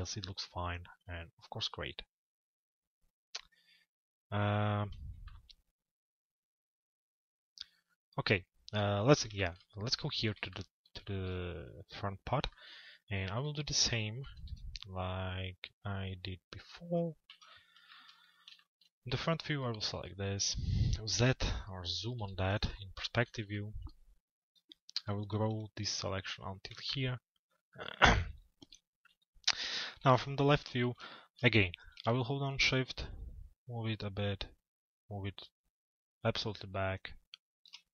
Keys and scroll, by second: 13.8 f, 22.2 z, 28.7 l, 29.5 z.